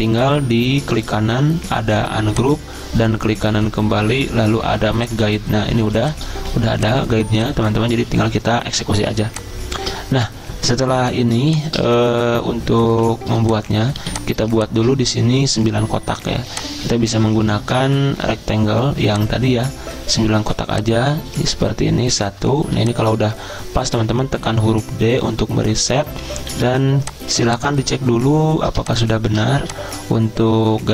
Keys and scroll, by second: 1.2-2.0 typing, 5.8-7.9 typing, 9.1-10.4 typing, 11.5-12.9 typing, 14.0 z, 22.6 z, 23.9 d, 26.5 z, 27.4 space, 28.8 space, 29.5 z.